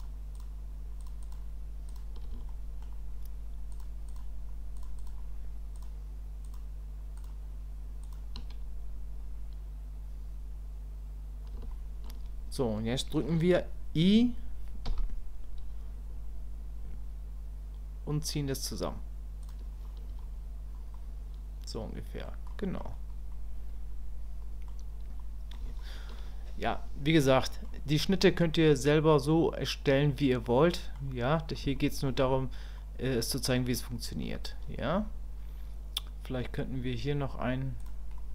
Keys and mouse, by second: 0.3 shift+click, 1.0 shift+click, 1.2 shift+click, 1.9 shift+click, 2.5 shift+middle click, 3.7 shift+click, 4.8-6.5 shift+drag, 7.2 shift+click, 11.7 shift+click, 21.0-22.2 middle drag, 22.5 middle click, 23.3-24.7 middle drag, 25.2 middle click, 25.8 shift+middle click, 27.2 middle click, 30.4 middle click, 31.8 shift+click, 32.8 middle click, 37.8 click, 38.2 click.